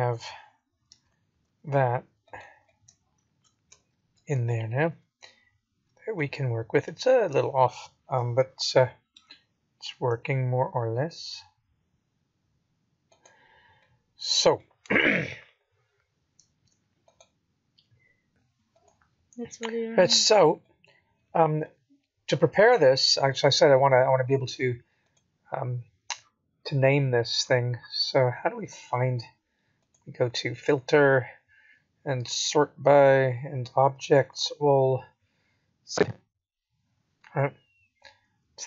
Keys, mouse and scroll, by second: 0.4 g, 2.8 middle click, 4.9 middle click, 7.1 middle click, 7.4 scroll up 1, 8.8 KP_7, 10.2 g, 13.9 middle click, 15.1-16.9 scroll down 3, 19.7-20.1 scroll up 3, 20.4 middle click, 21.8 scroll up 3, 22.3-22.8 scroll down 4, 24.8 click, 25.8-27.9 scroll down 38, 27.9-29.6 scroll up 19, 29.6 click.